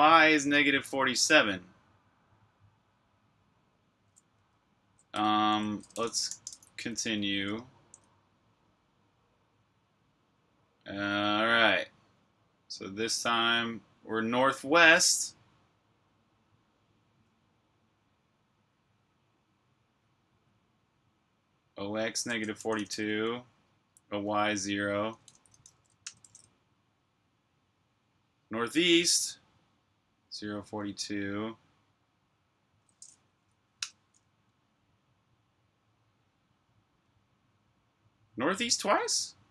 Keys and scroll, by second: 4.3-7.5 typing, 9.0 typing, 22.3-23.3 typing, 24.9-26.5 typing, 33.2 Up.